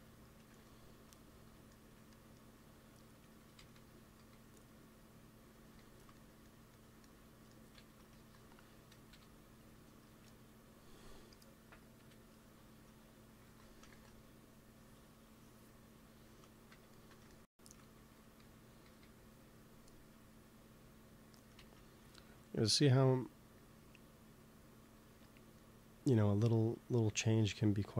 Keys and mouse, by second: 3.3 g, 3.5 f, 4.1 f, 4.6-6.5 drag, 5.5 f, 7.7-9.3 drag, 8.0 ctrl+s, 9.0 KP_1, 11.9 KP_1, 13.3 ctrl+s, 13.9 ctrl+s, 17.9 g, 18.1 f, 18.7 f, 19.3-22.7 drag, 21.5 ctrl+z, 22.0 middle click, 22.7 middle click, 25.5-27.4 middle drag.